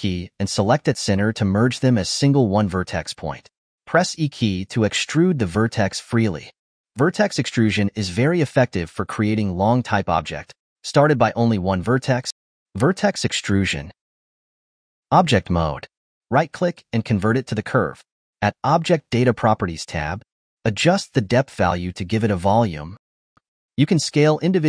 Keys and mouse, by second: 3.6 e, 4.8-6.6 typing, 7.9 Tab, 8.9 1, 9.0 m, 11.5-14.6 typing, 15.1 ctrl+Tab, 16.6-19.1 right drag, 20.0 click, 20.8-23.2 drag, 23.2-23.5 ctrl+middle drag, 23.5 click, 23.6 Tab, 24.0 click.